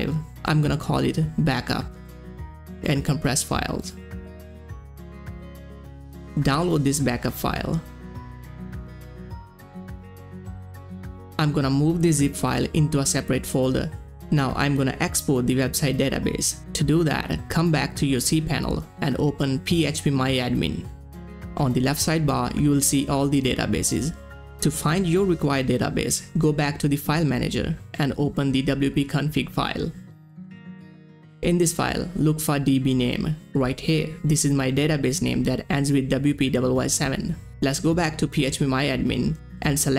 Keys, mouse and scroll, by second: 2.4-3.3 typing, 3.4 click, 5.5 click, 8.7 click, 11.0 click, 12.2 ctrl+x, 12.9 click, 14.1 click, 17.8 click, 17.8 scroll down 1, 19.5 click, 22.2 click, 22.2 click, 27.5 click, 28.0 scroll down 1, 28.5 click, 28.6 right click, 29.6 click, 31.4 click, 31.5 click, 32.3 click, 32.3-32.6 scroll down 1, 34.7 scroll down 1, 34.7 click, 38.0 click.